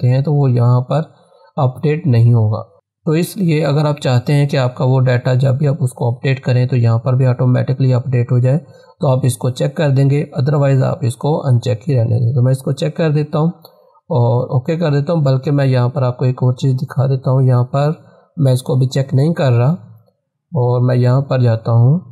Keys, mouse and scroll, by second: 13.0 click, 15.6 click, 15.6 click, 19.8 click.